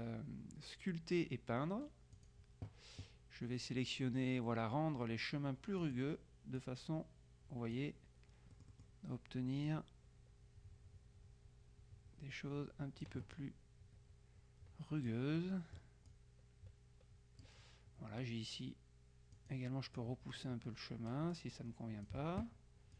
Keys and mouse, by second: 2.2 click, 5.9 click, 6.7-8.3 drag, 8.6 middle click, 9.8-13.7 drag, 15.5 middle click, 16.2 click, 19.5 click.